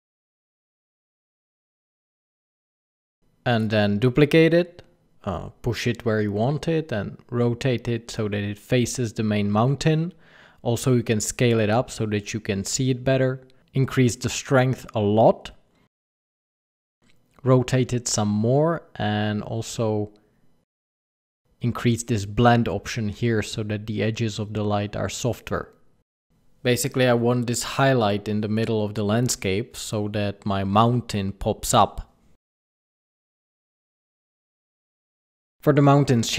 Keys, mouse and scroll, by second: 1.4 click, 4.4 click, 4.8 shift+d, 6.9 click, 10.6 s, 13.2 click, 14.2 KP_0, 14.5 KP_0, 14.7 KP_0, 15.4 middle click, 15.5 r, 16.0 middle click, 16.4 middle click, 16.7 r, 17.0 middle click, 17.5 g, 19.0 KP_0, 20.4 click, 22.8 click, 25.0 click, 26.5 middle click, 27.0-30.1 typing, 31.7 r, 32.8 click.